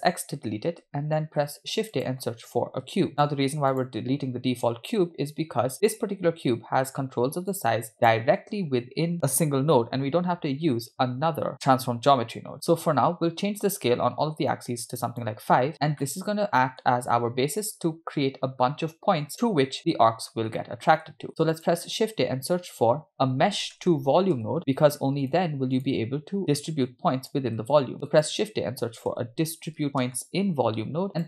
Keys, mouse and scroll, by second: 0.4 x, 1.3 shift+a, 4.7-5.7 drag, 5.9 click, 7.5-12.5 shift+drag, 14.6-15.4 drag, 16.0-17.0 middle drag, 20.3-20.6 scroll up 2, 20.6 middle click, 21.3 shift+a, 26.9-27.4 drag, 27.9 shift+a.